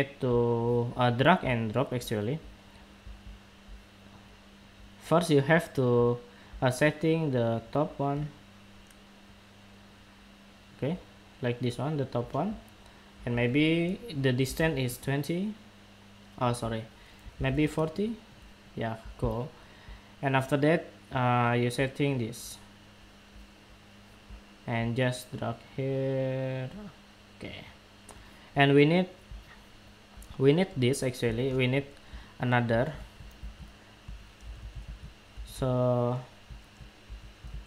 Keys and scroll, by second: 33.1 super+c, 34.4 super+c, 34.6 super+v, 35.8 super+v, 37.2 super+v.